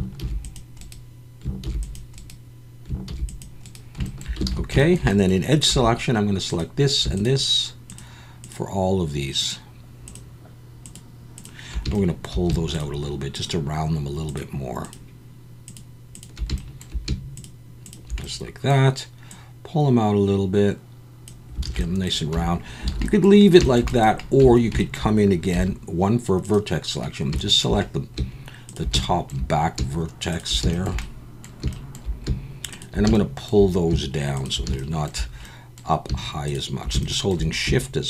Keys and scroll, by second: 0.2 ctrl+r, 1.6 ctrl+r, 3.1 ctrl+r, 4.5 alt+a, 5.7 2, 21.6 alt+a, 22.3 Tab, 22.9 alt+a, 24.4 Tab, 25.5 1.